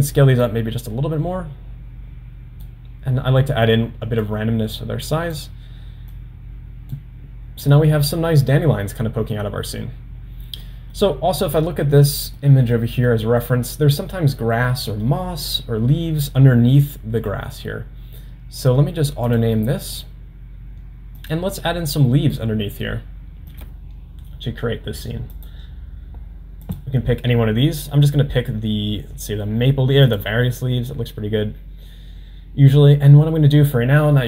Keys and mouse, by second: 0.4-2.9 drag, 4.3-5.5 drag, 6.1-7.1 drag, 10.7 middle click, 12.5 middle click, 13.2 middle click, 14.7 middle click, 17.0 middle drag, 19.4-20.3 drag, 21.3-22.1 drag, 23.5 click, 25.5-25.9 drag, 26.8 click.